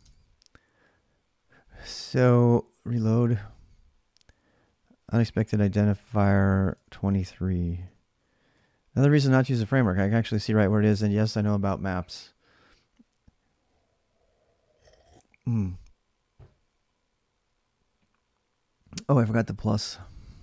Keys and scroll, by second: 6.5 alt+Tab, 7.5 ctrl+[, 7.6-9.1 typing, 18.8-20.4 typing.